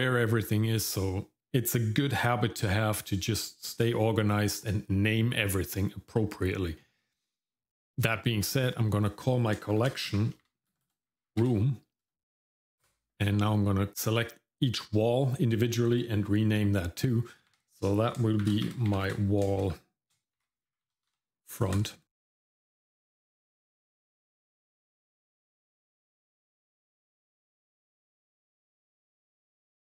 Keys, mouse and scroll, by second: 8.4 click, 8.6-12.8 drag, 10.8 BackSpace, 11.3 o, 13.1 shift+middle click, 13.4-13.9 scroll up 1, 13.9 click, 13.9-14.3 scroll down 1, 17.5 F2, 19.0 l, 22.5 click, 22.9 F2, 23.2 l, 24.1 click, 24.4 F2, 24.8 l, 25.7 BackSpace, 26.6 click, 26.9 F2, 27.3 l, 28.7 middle click, 29.1 click, 29.4 F2, 29.8 o.